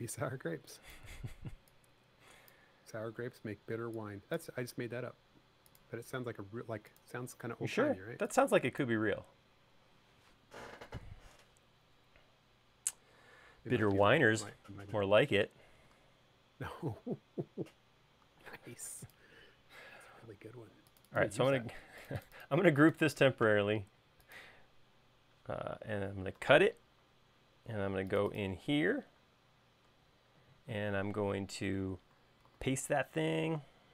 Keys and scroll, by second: 3.7-5.4 typing, 8.2 space, 8.6 e, 19.1 space, 27.1 super+x, 33.2 super+v.